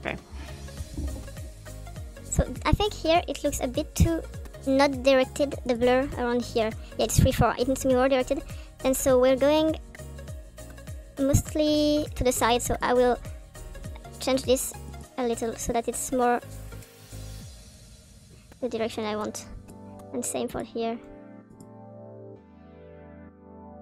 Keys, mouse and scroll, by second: 0.0 click, 4.8 click, 5.0-5.7 drag, 5.9-6.7 drag, 6.9-7.7 drag, 7.8 click, 9.7-12.1 drag, 12.7 click, 13.5 click, 15.9 click, 17.4 click, 18.1 click, 19.1 click, 19.7 click, 20.6 click, 20.9 click, 21.4 click, 22.4 click, 23.0 click.